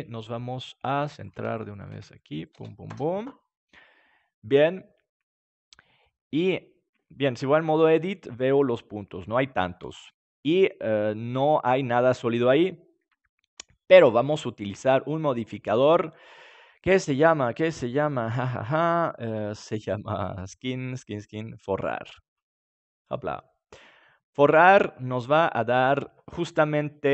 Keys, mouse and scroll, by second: 0.1 middle click, 0.6 middle click, 1.1-4.2 drag, 6.0-7.7 middle drag, 7.7 Tab, 9.8 Tab, 10.4 middle click, 14.5-16.6 drag, 23.1 middle click.